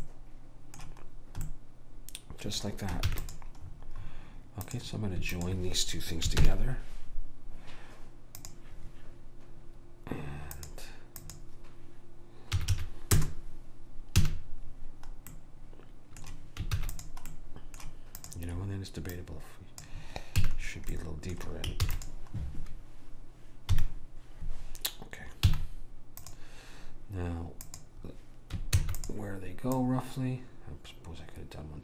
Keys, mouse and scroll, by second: 3.1 ctrl+s, 4.8-7.2 drag, 6.5 ctrl+j, 8.5 click, 10.7 click, 14.3 a, 15.4 middle click, 16.8 ctrl+s, 18.3 click, 20.4 click, 20.5 a, 21.9 ctrl+s, 23.8 KP_1, 25.5 z, 27.7 click, 29.0 shift+d, 29.9 click.